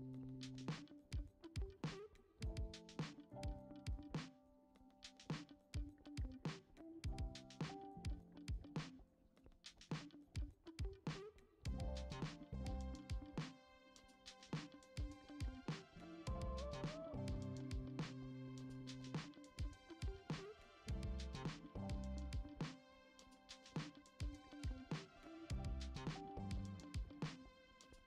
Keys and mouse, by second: 0.9 g, 2.3 e, 4.0 middle click, 4.8 middle click, 5.3 click, 5.6 shift+middle click, 7.2 i, 8.6 e, 10.9-11.6 right drag, 12.6 click, 13.3 click, 14.0 click, 15.2-16.2 drag, 17.4 i, 19.5 i, 21.1 click, 22.6 click, 23.0 middle click, 23.5 e, 27.2 ctrl+Tab.